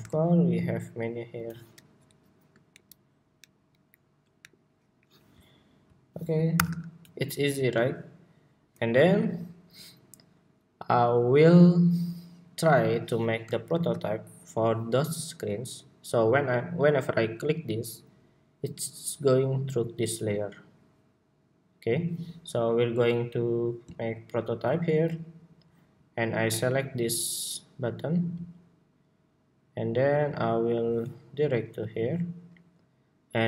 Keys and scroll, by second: 6.3 super+-, 13.4 super+s, 14.2 super+s.